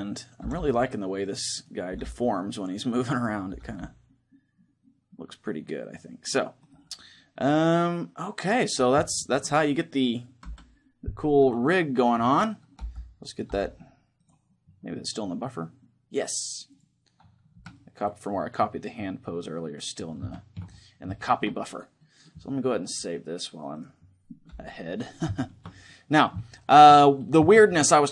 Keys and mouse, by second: 0.2 r, 1.6-4.8 right drag, 1.6 r, 3.3 r, 6.4-8.2 right drag, 6.7-8.5 middle drag, 8.8-11.1 middle drag, 10.2 KP_1, 11.9-13.1 right drag, 12.6 g, 13.3 r, 14.0-18.4 drag, 17.3 a, 17.5-23.7 middle drag, 22.6-24.4 drag, 25.1-28.1 middle drag.